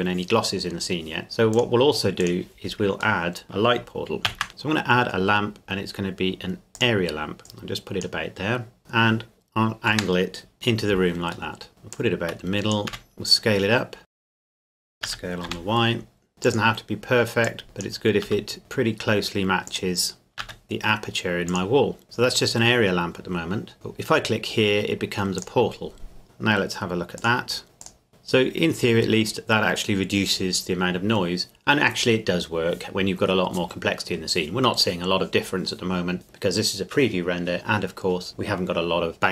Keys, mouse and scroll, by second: 1.5 click, 3.2 middle click, 3.4 click, 4.3 shift+a, 6.7-7.5 drag, 7.7-8.8 drag, 8.8 r, 9.9 Escape, 10.5 KP_Enter, 11.5 middle click, 11.7 ctrl+KP_3, 11.9 click, 12.9 s, 14.1 click, 15.1 s, 15.5 y, 16.4 click, 18.3 s, 19.7 click, 20.4 s, 20.6 z, 21.5 click, 22.0 middle click, 25.4 click, 27.2 click, 29.1-29.5 scroll up 1.